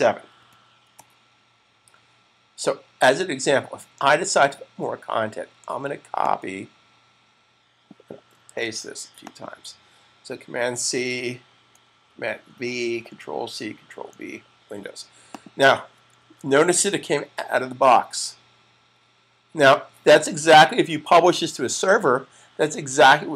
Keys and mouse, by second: 0.3 7, 6.4 click, 8.4 super+c, 9.4 click, 13.7 v, 15.2 click, 16.0 super+s.